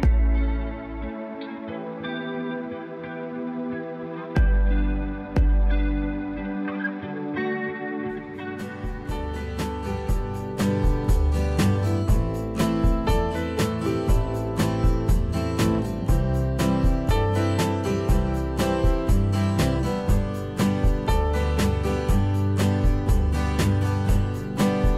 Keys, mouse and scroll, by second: 9.9 F2, 17.9 f.